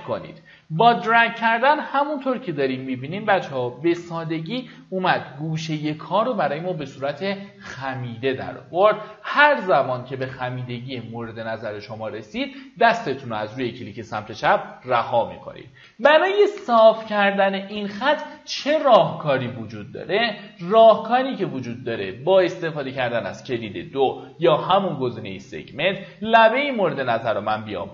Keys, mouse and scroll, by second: 17.3 q, 22.0 2, 26.3 click.